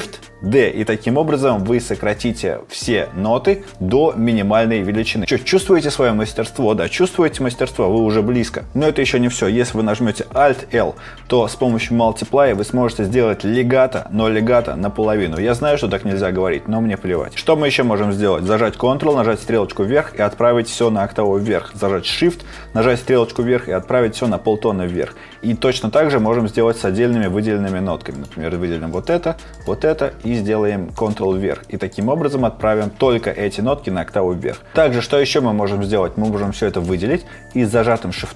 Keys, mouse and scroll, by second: 10.4 alt+l, 19.5 ctrl+Up, 20.7 ctrl+Down, 23.4 shift+Up, 24.3 shift+Down, 37.2 ctrl+click, 37.9 shift+click.